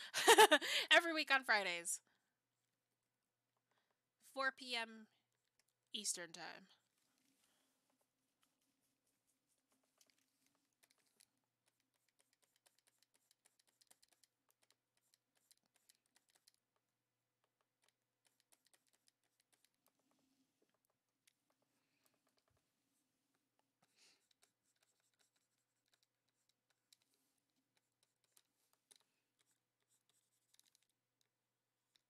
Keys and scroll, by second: 3.6 ctrl+z.